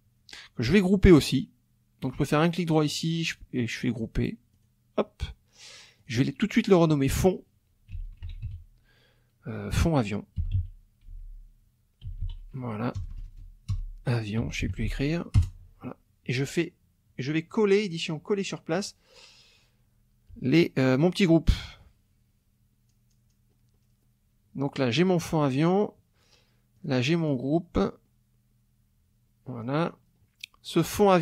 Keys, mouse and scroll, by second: 2.1 right click, 4.5 click, 6.0 click, 7.7-8.9 typing, 10.6-13.0 typing, 14.2-15.3 typing, 15.4 Return, 17.5 click, 18.7 click, 22.9-23.5 scroll down 1, 23.8-24.2 scroll down 2, 24.9 click, 25.6-26.0 scroll up 2, 26.8 click, 27.3 scroll down 2, 27.8 scroll up 2, 29.6-30.3 scroll down 4, 31.0 click.